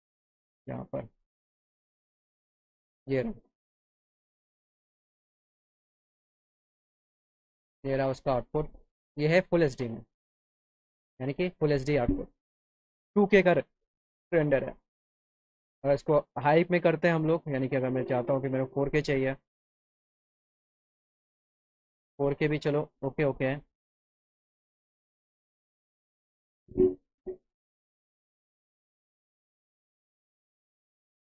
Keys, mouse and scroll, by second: 0.2 click, 2.6 right click, 6.5 click, 8.0 middle click, 9.0 middle click, 9.3 middle click, 9.7 scroll up 4, 10.5-11.0 scroll up 4, 14.7 click, 17.7 click, 18.6 click, 19.5 click, 20.9 click, 22.3 click.